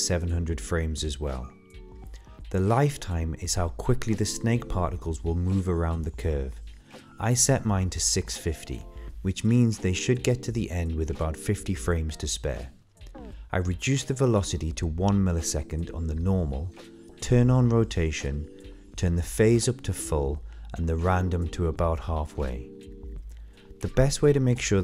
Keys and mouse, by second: 1.1 KP_0, 2.3-6.2 drag, 13.1-15.0 drag, 16.2 click, 18.6 click, 19.5-20.0 drag, 20.6-22.0 drag.